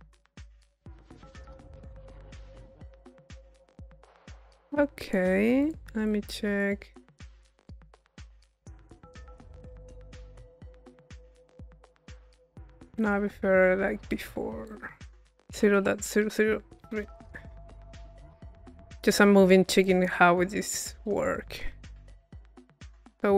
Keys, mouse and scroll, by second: 3.1-4.5 drag, 4.6 click, 5.6 click, 6.1-7.5 drag, 7.5 middle click, 11.5 middle click, 12.1-13.4 drag, 14.7-15.8 drag, 17.2-19.3 drag, 19.4-20.7 drag, 20.7-23.3 middle drag.